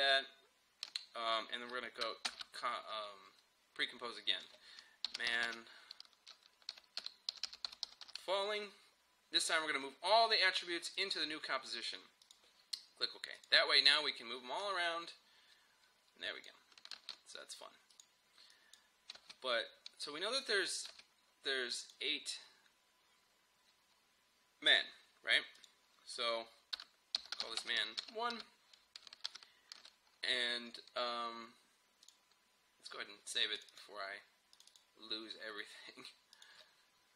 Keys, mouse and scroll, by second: 0.0 ctrl+z, 2.3 ctrl+shift+c, 4.8-8.6 typing, 11.0-17.0 drag, 17.0 ctrl+z, 17.9 click, 19.2 space, 21.9 click, 24.8 click, 26.8 Return, 26.9-28.0 typing, 28.4 Return, 29.3 ctrl+s, 32.1 click.